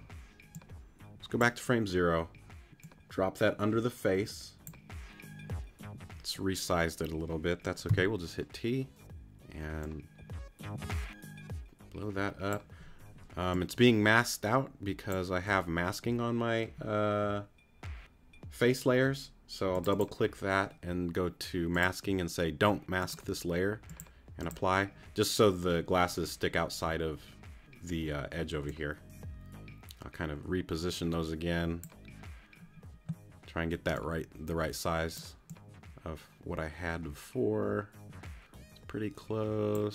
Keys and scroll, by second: 7.9 t.